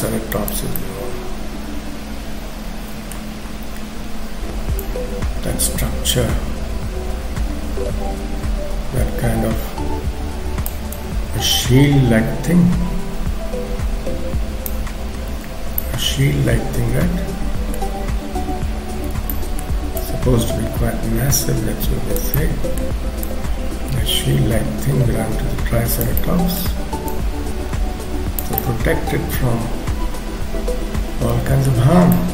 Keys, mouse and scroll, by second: 0.4 click, 0.8 middle click, 4.8 click, 11.0 click, 15.8 middle click, 19.3 middle click, 20.0 click, 22.4 middle click, 23.2 click, 26.2 middle click, 27.1 click, 28.6 middle click, 31.7 scroll up 1, 31.9-32.3 scroll down 5, 32.2 middle click.